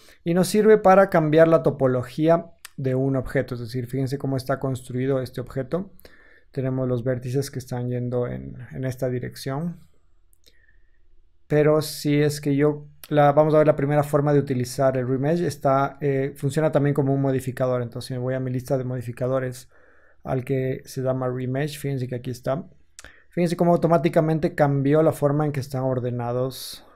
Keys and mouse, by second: 3.0 Tab, 3.0-4.1 drag, 4.5-6.9 drag, 6.3 3, 6.9-8.1 alt+middle drag, 8.1-9.2 alt+drag, 9.2-16.3 alt+middle drag, 10.5 Tab, 16.3-26.9 drag.